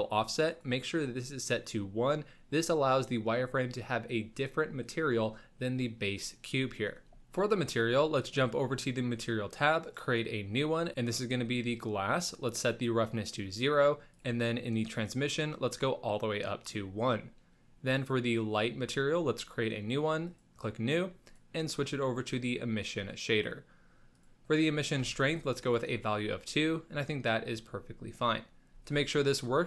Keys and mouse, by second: 0.5 click, 8.1 click, 9.8 click, 12.4 click, 15.3 click, 17.9 click, 20.2 click, 21.2-23.1 drag, 24.1-25.3 drag, 25.9-27.0 middle drag, 27.3-28.4 middle drag, 28.7 z.